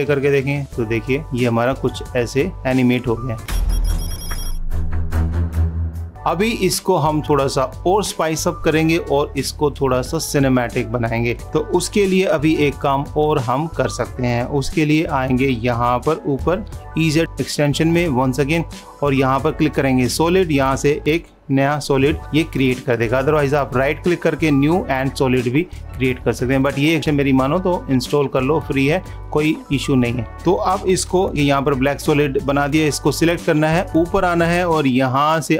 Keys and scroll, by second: 12.3 ctrl+s, 22.2 super+-.